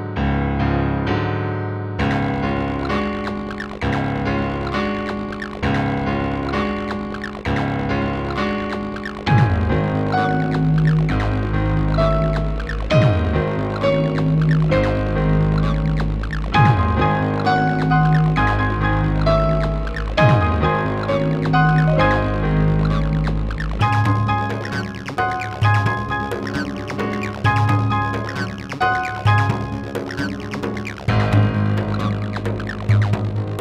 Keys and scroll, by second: 1.8 space, 4.3 space, 16.2 g, 18.6 w.